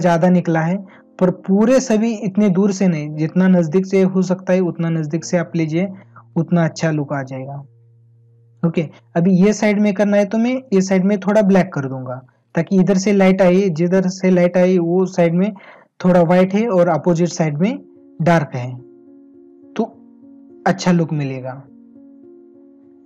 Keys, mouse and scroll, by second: 2.8 ctrl+alt+z, 6.6 space.